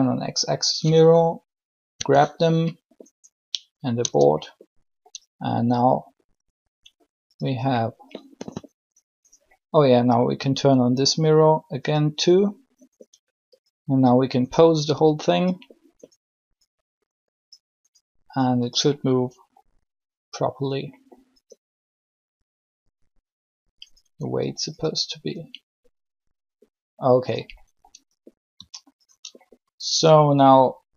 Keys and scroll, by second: 1.7 g, 4.0 Tab.